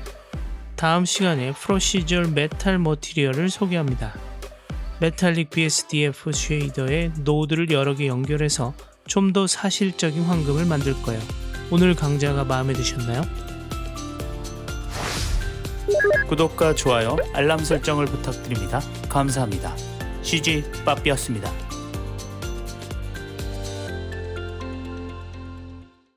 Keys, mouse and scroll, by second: 0.4 n, 0.5-1.5 middle drag, 1.9 middle click, 2.6 middle drag, 3.0-4.3 middle drag.